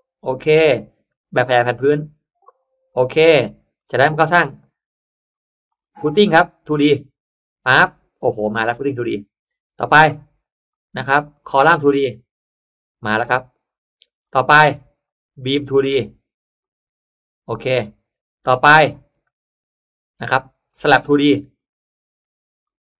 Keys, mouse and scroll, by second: 0.2 click, 1.0 click, 2.8 click, 3.6 click, 5.6 click, 6.0 click, 6.6 click, 7.8 middle click, 8.3 scroll up 1, 8.4 scroll down 1, 9.8 click, 10.6 click, 11.2 click, 11.8 click, 14.1 click, 15.0 click, 15.8 click, 16.5 click, 20.6 click, 21.4 click, 22.6 click.